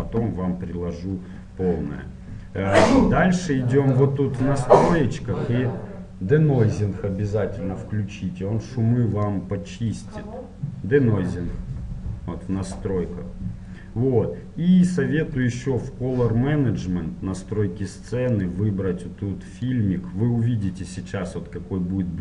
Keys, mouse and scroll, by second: 0.8-5.6 middle drag, 4.2-6.0 drag, 9.3-11.3 drag, 15.1-17.1 drag, 15.9-18.2 middle drag, 18.6-21.8 drag.